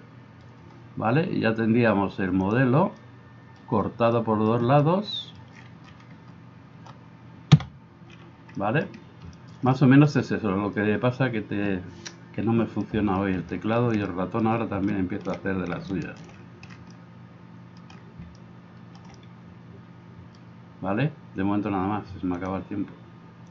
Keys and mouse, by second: 7.6 KP_Divide.